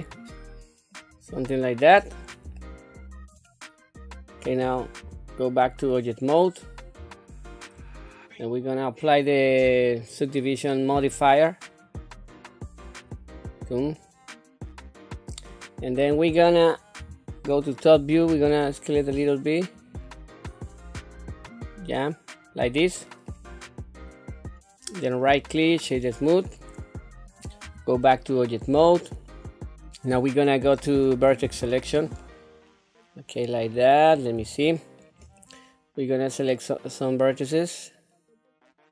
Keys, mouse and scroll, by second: 1.4-2.3 scroll up 2, 2.6 shift+middle click, 3.5-4.2 scroll down 2, 5.0 Tab, 5.9 middle click, 7.1 shift+middle click, 10.9 click, 11.9-13.2 drag, 13.9-15.5 middle drag, 15.9-16.8 scroll down 1, 16.9 KP_7, 18.2 s, 20.3-23.3 middle drag, 23.6 scroll up 2, 24.4-25.1 scroll down 1, 25.1 right click, 25.2-25.8 scroll, 25.8 right click, 25.8-26.3 scroll down 1, 26.5 middle click, 27.6 Tab, 28.1 scroll up 1, 28.8 shift+middle click, 31.4 1, 32.2-33.5 middle drag, 33.8-34.3 scroll down 1, 34.5 shift+middle click, 35.4-38.9 middle drag.